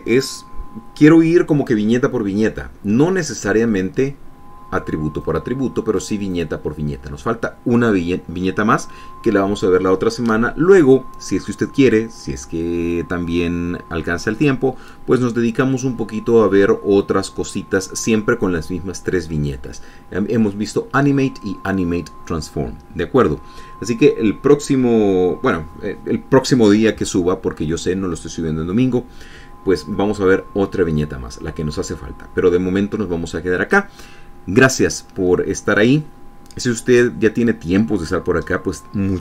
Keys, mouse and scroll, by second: 5.9 click, 7.0 click.